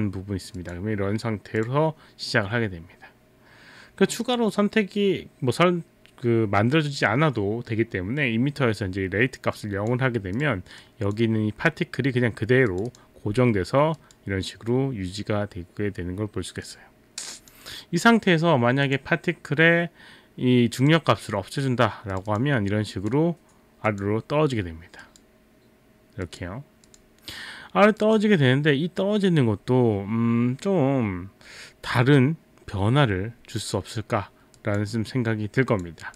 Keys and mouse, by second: 0.6 click, 1.6 click, 4.3 click, 9.6 click, 10.4 click, 10.8 click, 12.7 click, 12.9 click, 14.0 click, 16.6 click, 17.4 click, 18.8 click, 20.8 click, 22.1 click, 22.3 click, 25.0 click, 26.2 click, 26.9 click, 28.0 click, 34.6 click, 35.8 click.